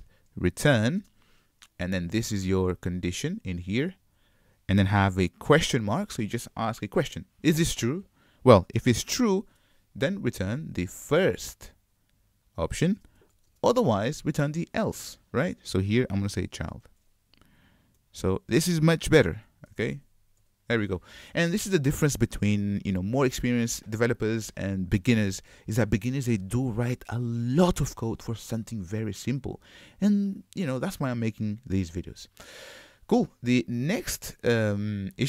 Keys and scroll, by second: 3.6 super+c, 4.2 super+v, 11.2 super+c, 11.9 super+v, 19.3 super+y.